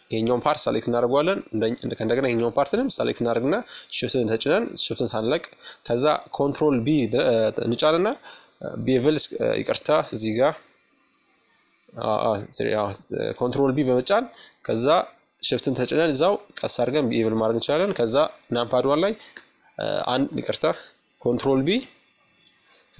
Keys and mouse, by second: 4.2 ctrl+b, 9.7 middle click, 10.9 middle click, 11.3 ctrl+b, 11.7 middle click, 11.9 middle click, 19.5 ctrl+b.